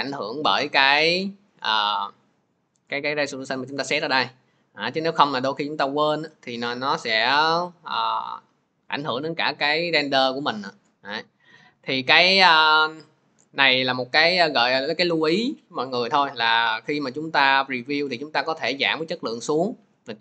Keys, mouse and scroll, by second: 5.2 click, 6.0 click, 9.0 click, 10.5 click, 14.7 click, 17.9 click, 18.6 click.